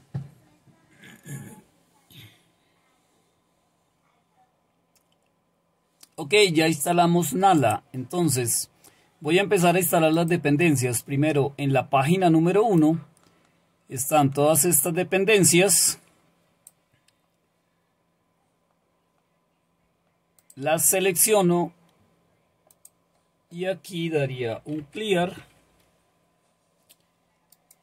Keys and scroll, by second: 24.3-25.9 typing.